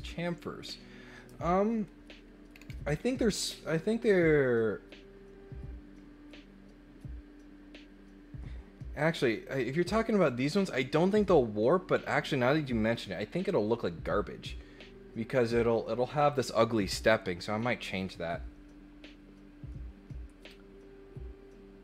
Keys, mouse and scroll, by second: 2.5 scroll down 1, 2.8 scroll up 1, 3.0 scroll down 1, 3.3 scroll up 1, 9.4 click.